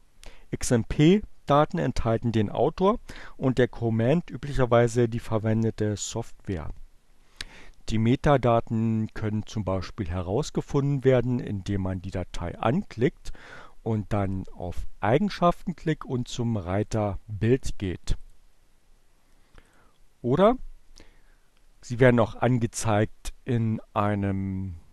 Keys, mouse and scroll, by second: 16.6-18.5 drag, 19.3 click, 21.8-22.8 right drag, 24.6 click.